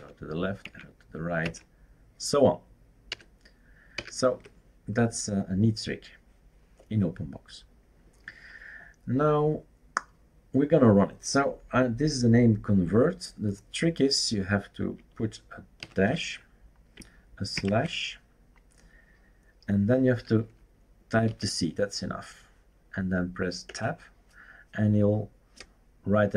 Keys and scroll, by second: 0.6 super+Right, 1.4 super+Right, 3.1 super+5, 3.9 super+6, 17.6 /, 21.4 c, 23.7 Tab.